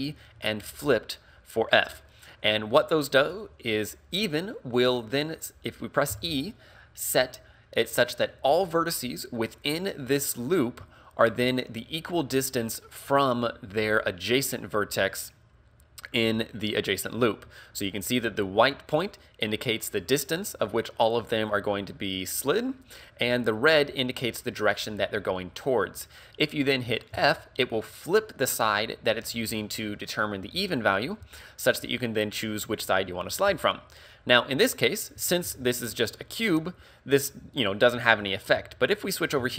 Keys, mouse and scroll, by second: 34.9 right click, 35.5 ctrl+z, 38.8 shift+middle click, 39.4-39.5 scroll up 6.